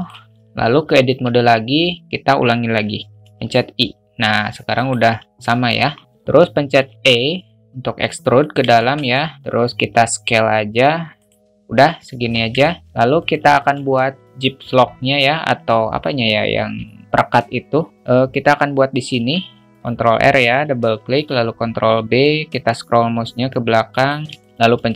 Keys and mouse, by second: 1.0 Tab, 3.2 i, 8.8 alt+shift+middle click, 9.0 middle click, 12.1 Tab, 12.6 alt+middle drag, 12.8 `, 13.5 shift+middle drag, 14.5 Tab, 19.1 ctrl+r, 21.2 ctrl+b, 24.4 alt+shift+middle click, 24.7 3.